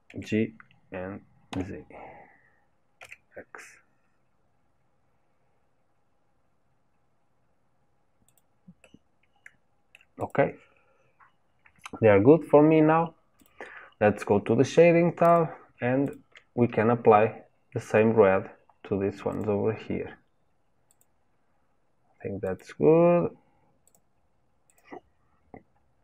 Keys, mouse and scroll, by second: 0.1 g, 8.8-10.3 middle drag, 10.3 click, 13.5 click, 16.1 shift+click, 21.0-22.6 drag, 24.8-26.0 drag.